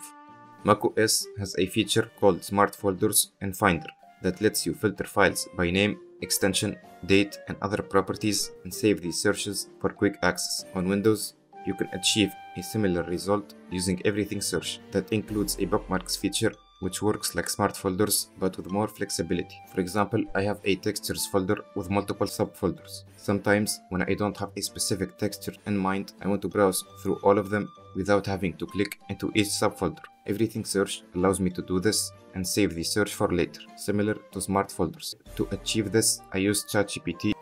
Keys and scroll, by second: 10.8 F10, 14.8 F6.